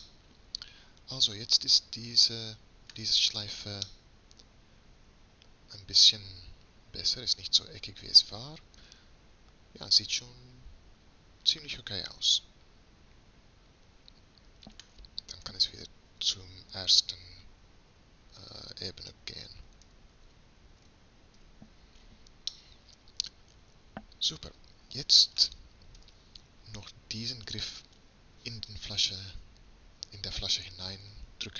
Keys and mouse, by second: 0.1-2.0 middle drag, 4.1 middle click, 6.0 middle click, 15.5 Tab, 19.9 m, 21.5 1, 26.1 Tab, 28.1-31.5 middle drag.